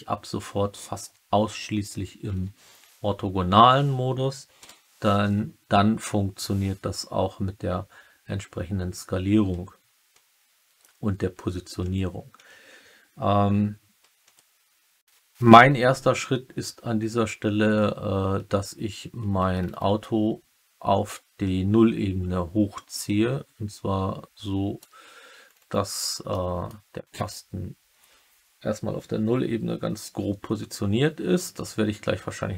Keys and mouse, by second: 2.2 KP_5, 4.5 KP_3, 21.0-24.7 drag, 26.2-26.6 middle drag.